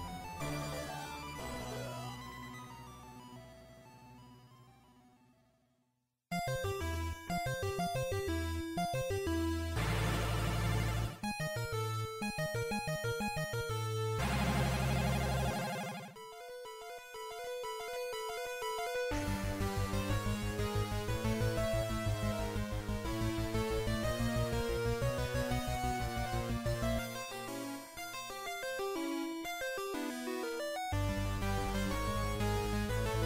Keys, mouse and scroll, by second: 0.7 right click, 0.7 scroll up 1, 1.2-1.9 scroll up 3, 1.9 x, 4.2 alt+right click, 8.4 ctrl+z, 9.8 ctrl+z, 11.7 ctrl+r, 14.4 click, 16.4 ctrl+r, 21.0 click, 23.3 right click, 25.6 x, 30.4 middle click, 33.0 shift+right click.